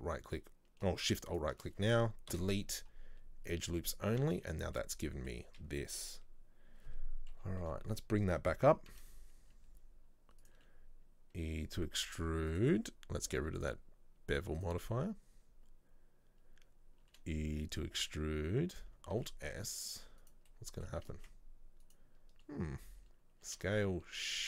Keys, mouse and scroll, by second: 3.6 Delete, 3.9-7.4 middle drag, 7.4 KP_3, 8.8 g, 14.7 click, 15.4-16.0 scroll up 1, 16.6-17.1 scroll down 2, 17.1 e, 20.6 middle click, 21.3 alt+s.